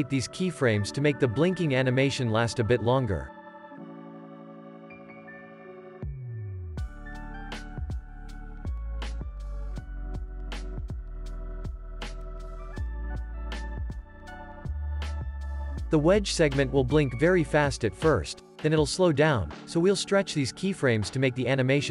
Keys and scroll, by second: 1.5 ctrl+c, 1.8 ctrl+v, 2.3 ctrl+s, 3.0 x, 4.3 z, 7.3 ctrl+c, 7.5 ctrl+v, 9.4 ctrl+v, 11.3 ctrl+v, 13.8 space, 15.1 ctrl+s, 17.9 alt+x, 19.6 alt+z.